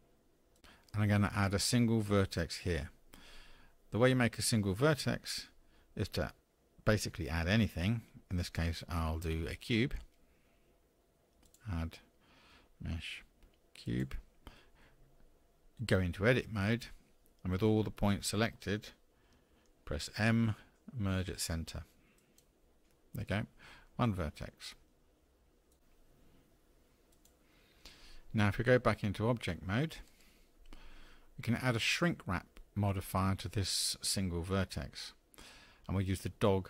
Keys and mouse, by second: 11.5-14.0 drag, 20.3 m, 30.1 Tab.